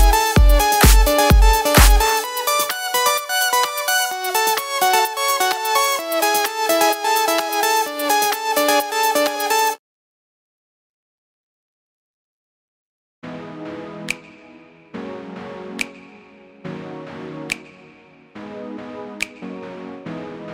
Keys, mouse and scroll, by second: 1.0 ., 1.8 z, 2.5 alt+s, 3.9 Escape, 5.8 s, 6.5 click, 6.6-9.4 middle drag, 7.6 z, 9.4 click, 10.6 click, 12.8 Escape, 12.9-14.1 middle drag, 13.4 scroll down 1, 14.1 click, 14.2 z, 17.0 click, 17.4 click, 17.7 click, 18.3 l.